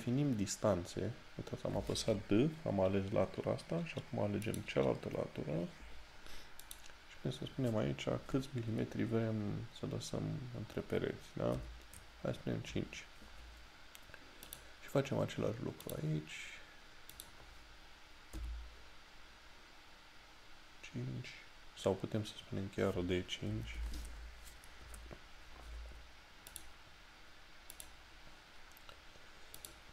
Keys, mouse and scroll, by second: 4.5 click, 14.5 click, 23.9 d, 26.6 click.